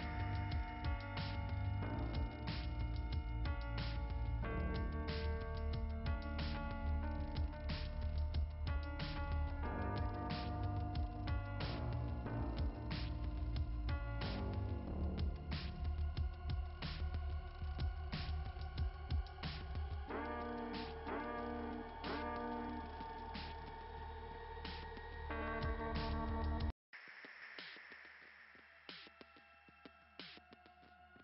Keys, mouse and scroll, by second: 7.3-8.0 scroll down 1, 8.0 scroll down 1, 9.1 click, 13.4 click, 16.9 click, 21.2-22.4 scroll down 2, 22.4 click, 25.1 click, 25.5 click, 25.8 click, 26.1 click, 26.5 click, 26.8 click, 27.1 click.